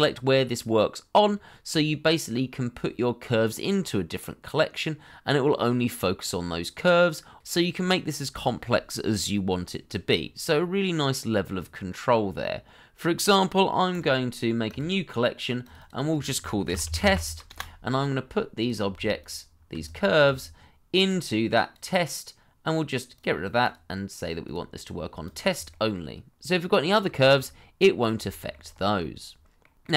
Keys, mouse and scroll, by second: 9.0 middle click, 13.9 right click, 15.7 double click, 16.6 shift+t, 16.8 e, 17.0 s, 18.3 Return, 19.8 shift+click, 24.3 double click, 25.7 middle click, 27.5 scroll down 1, 28.3-28.9 scroll up 2, 28.4 shift+middle click, 28.9 middle click.